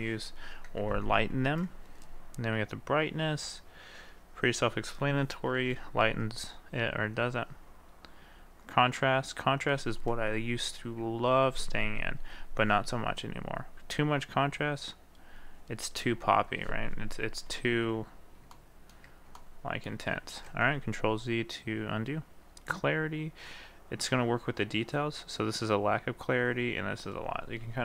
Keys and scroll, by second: 5.7 ctrl+z, 11.6 ctrl+z.